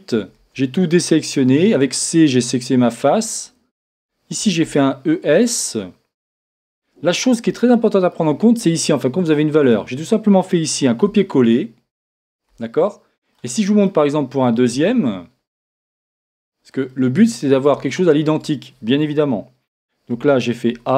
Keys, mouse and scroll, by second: 0.1 Tab, 0.3 a, 1.3 c, 4.4 e, 9.6-12.5 drag, 9.6 middle click, 20.1 a, 20.7 c.